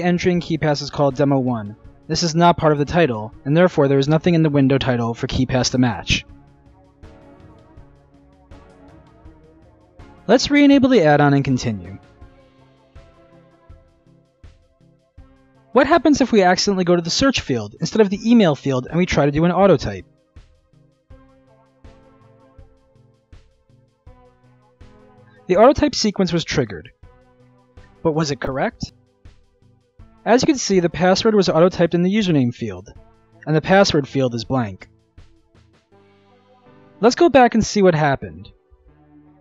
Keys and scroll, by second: 23.2 ctrl+alt+a, 23.3-24.2 typing.